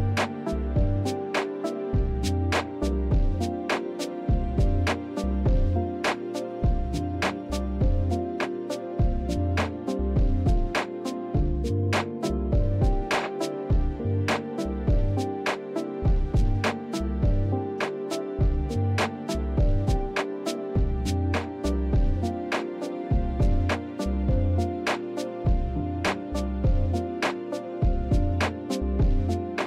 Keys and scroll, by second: 0.0 shift+z, 1.8 shift+z, 2.6 ctrl+b, 6.2 Tab, 17.1 KP_7, 17.5 shift+z, 18.6 Tab, 20.4 3, 21.0 shift+z, 22.5 KP_7, 22.9 shift+z, 24.6 shift+z, 25.3 ctrl+z, 26.6 shift+z, 26.6 shift+z, 27.7 shift+d, 28.9 p.